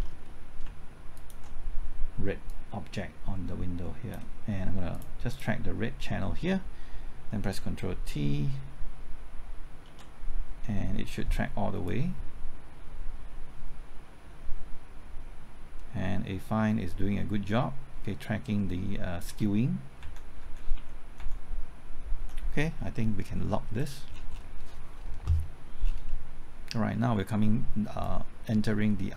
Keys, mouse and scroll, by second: 1.2 ctrl+click, 2.5-4.8 drag, 9.9 ctrl+t, 11.9-19.8 drag, 20.0 Right, 20.4 Right, 20.8 Left, 21.2 Right, 22.2 Left, 23.8 click, 24.1 scroll down 1, 26.5-28.0 scroll up 1, 28.0-29.1 drag.